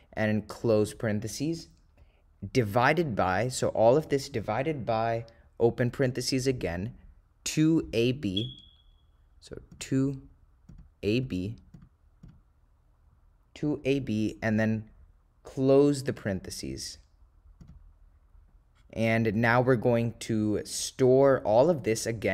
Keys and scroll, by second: 0.9 ), 4.1 /, 6.1 (, 9.0 ÷, 9.8 2, 16.2 ), 17.7 ), 19.7 /, 21.6 ÷, 22.2 /.